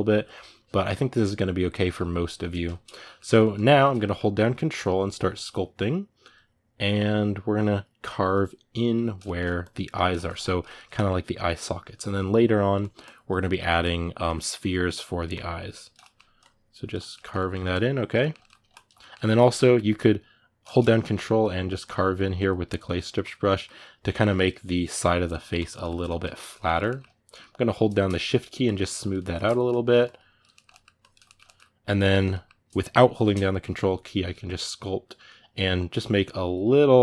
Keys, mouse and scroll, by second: 4.5-9.0 ctrl+drag, 9.0 middle click, 9.4-10.5 ctrl+drag, 10.5 ctrl+middle click, 11.0-13.3 ctrl+drag, 13.3 ctrl+middle click, 13.6 ctrl+click, 14.1 ctrl+middle click, 14.3 ctrl+click, 14.8 ctrl+middle click, 15.1 ctrl+click, 15.8 middle click, 16.2 ctrl+click, 16.7 ctrl+middle click, 17.5 ctrl+click, 17.9 ctrl+middle click, 18.5 ctrl+click, 18.7-20.6 middle drag, 20.6-25.6 ctrl+drag, 25.6 ctrl+middle click, 26.4 ctrl+click, 26.6-28.0 middle drag, 28.0-29.2 shift+drag, 29.2 middle click, 29.8 shift+click, 30.3 ctrl+middle click, 30.7 ctrl+click, 31.0-33.2 ctrl+middle drag, 33.2-37.0 drag.